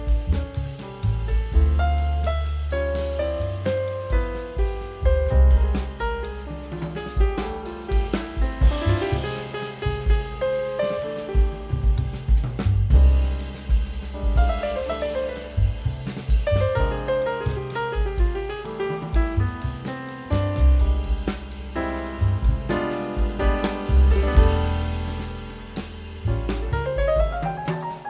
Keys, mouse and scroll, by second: 2.4 scroll down 1, 6.4 ctrl+g, 7.0 shift+F2, 7.3 scroll down 1, 9.6 double click, 11.2 scroll up 1, 11.9 ctrl+c, 13.0 ctrl+End, 13.2 ctrl+Page_Up, 16.9 double click, 18.8-19.7 typing.